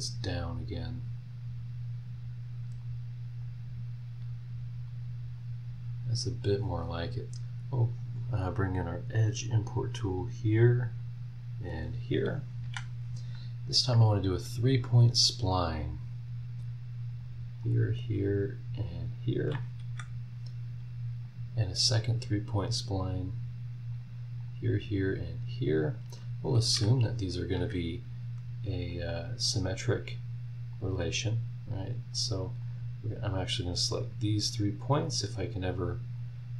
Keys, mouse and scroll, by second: 0.5 click, 2.8 click, 4.9 click, 6.3 click, 7.9 click, 9.5 click, 11.0 click, 12.6 Escape, 15.5 click, 17.1 click, 17.6 click, 18.8 click, 19.8 Escape, 21.2 click, 22.0-23.5 scroll up 1, 23.5-23.9 scroll up 1, 23.9 click, 24.5 click, 24.7-25.9 scroll up 1, 25.9 click, 26.2-27.1 scroll up 1, 26.6 Escape, 27.1 scroll up 1, 27.6 Escape, 28.9 click, 29.4 click, 30.7 click, 32.1 click, 32.6 click, 34.0 click.